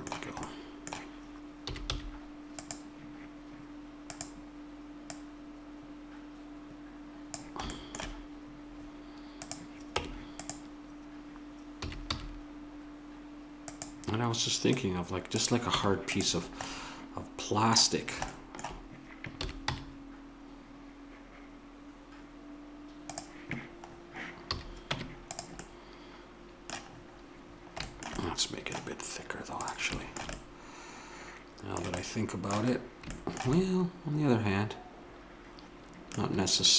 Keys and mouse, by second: 1.6 s, 4.1-6.9 drag, 7.7-11.0 middle drag, 9.9 Tab, 11.0 click, 11.8 s, 14.6-16.4 drag, 15.7 Tab, 19.4 s, 24.5 a, 24.9 Tab, 28.3 middle click, 28.5 middle click, 29.6 right drag, 29.7-31.4 middle drag, 35.3-35.7 middle drag, 36.0-36.7 middle drag.